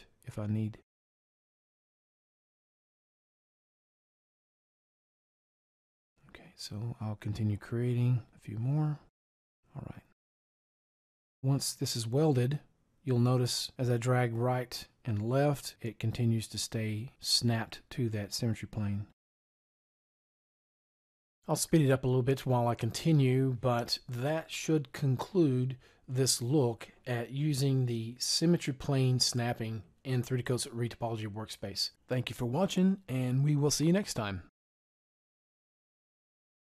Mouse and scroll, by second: 8.7-11.4 right drag.